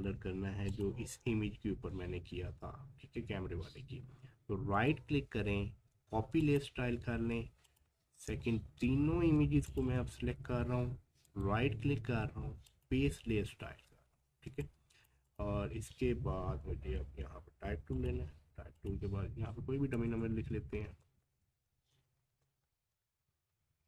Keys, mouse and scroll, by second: 4.7 click, 4.7 right click, 6.4 click, 8.1 scroll down 1, 9.3-9.7 scroll up 1, 9.7 shift+click, 10.0-10.4 scroll down 1, 11.3 right click, 12.7 click, 13.9-14.3 scroll up 1, 14.5 space, 14.6 click, 14.9 space, 15.2 click, 15.7 scroll up 1, 17.9 click.